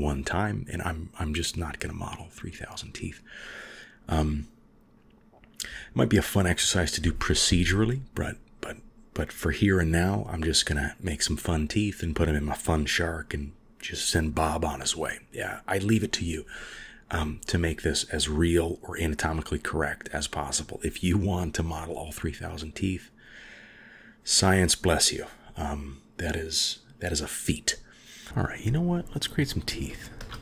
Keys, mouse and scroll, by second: 0.4 middle drag, 2.0-2.7 drag, 3.9 click, 5.1 g, 8.1 click, 8.4 g, 10.2 click, 10.5 g, 11.6-12.5 drag, 12.0 g, 12.7-14.4 middle drag, 14.4-15.5 drag, 14.8 g, 15.8-16.5 middle drag, 17.4 middle click, 17.8-19.7 middle drag, 18.8-19.5 drag, 19.6 drag, 19.9-20.9 middle drag, 22.5-23.1 middle drag, 24.2-24.8 drag, 25.9-27.4 middle drag, 28.1 KP_1, 30.0 shift+a.